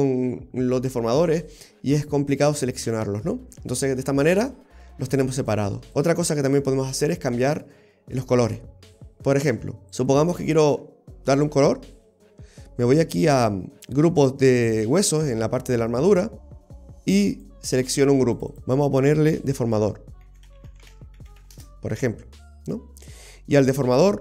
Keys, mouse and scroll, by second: 3.5-5.4 scroll up 2, 3.9 middle click, 5.4 click, 5.9 click, 5.9 scroll up 1, 6.0-6.5 scroll down 3, 6.5-7.0 scroll down 1, 7.0-8.0 scroll down 3, 8.5-9.5 scroll down 2, 9.5 middle click, 9.9 right click, 17.4 click, 18.4 click, 18.6 click.